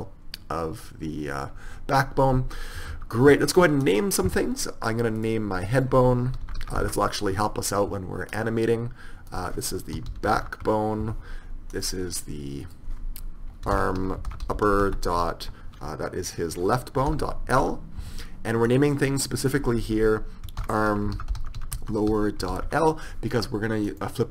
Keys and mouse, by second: 3.1 KP_1, 3.9-5.3 right drag, 5.3 middle click, 7.0 right click, 8.5 right click, 9.4 click, 10.2-11.4 right drag, 11.9 right click, 12.7 middle click, 13.6 right click, 14.7 p, 18.8-21.1 right drag, 24.0-24.3 right drag.